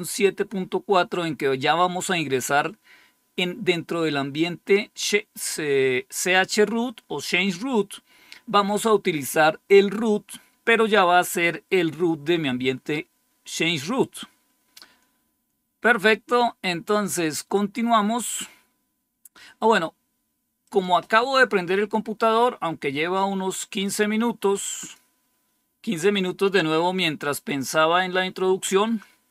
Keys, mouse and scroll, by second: 20.6 click, 23.1 click, 24.7 click, 25.0 click.